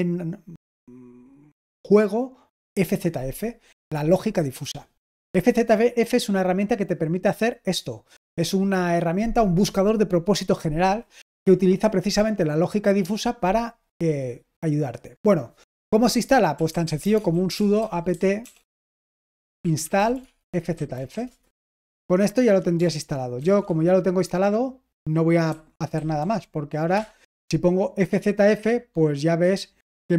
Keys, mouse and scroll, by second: 5.5-7.7 scroll down 2, 8.1-10.9 scroll down 2, 13.7-15.2 scroll down 2, 15.2 click, 16.2-21.4 typing, 23.3 ctrl+c, 25.2-26.6 typing, 26.9 Return.